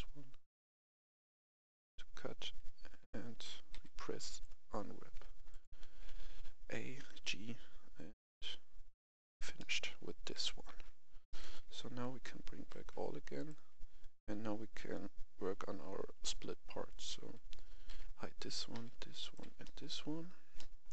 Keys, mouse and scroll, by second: 2.1-2.7 scroll up 1, 2.7-3.2 scroll down 1, 3.7 u, 4.2-5.3 drag, 5.4 a, 5.5 click, 7.0 g, 8.9 click, 9.5 middle click, 10.7 alt+h, 11.2 middle click, 11.6 Tab, 12.5 alt+h, 12.8-13.2 scroll down 1, 13.3 right click, 17.9 h, 18.4 right click, 18.7 h, 19.2 right click, 19.4 h, 19.6 middle click, 20.0 scroll up 1, 20.5 middle click.